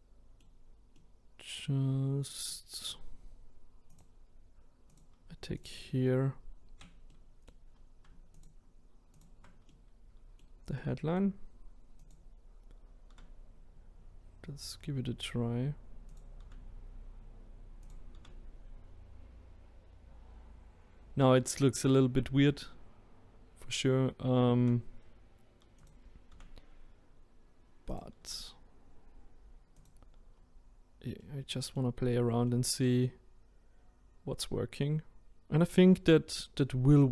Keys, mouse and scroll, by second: 3.9 click, 4.9 click, 5.6 shift+click, 7.1-8.4 middle drag, 8.4 shift+click, 9.2 shift+click, 9.7-12.1 middle drag, 12.1 click, 13.1 e, 16.4 e, 26.3 e, 28.2 e, 30.3-31.2 scroll down 2, 31.2-32.2 middle drag, 32.2-32.5 scroll down 1, 32.5-37.1 middle drag.